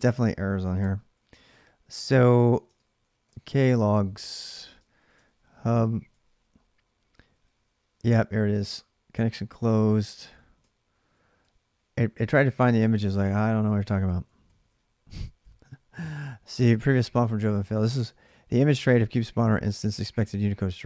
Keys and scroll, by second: 0.6 ctrl+c, 1.8 ctrl+[, 1.9 k, 2.5 ctrl+c, 3.1-5.3 typing, 5.9 Return, 9.9-14.2 typing, 15.4-16.6 typing.